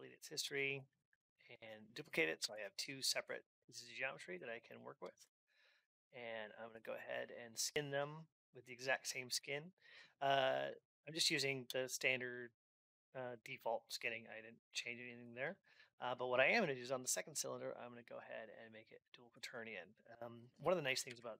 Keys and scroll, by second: 2.1 ctrl+d, 20.8 ctrl+Up.